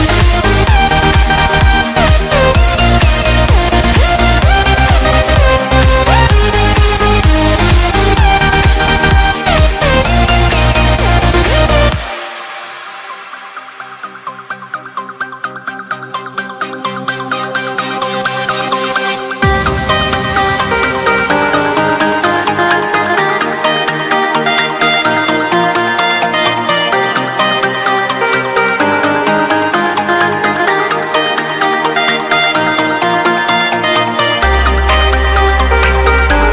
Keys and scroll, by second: 0.6 ctrl+r, 1.6 Escape, 3.1 F3, 6.7 F2, 11.5 F3, 11.9 ctrl+z, 15.2 F2, 16.7 Escape, 18.2 alt+c, 18.3 alt+w, 18.8 p, 23.1 Escape, 23.7 F3, 28.7 F2, 29.8 Escape, 33.5 ctrl+z, 35.6 Delete.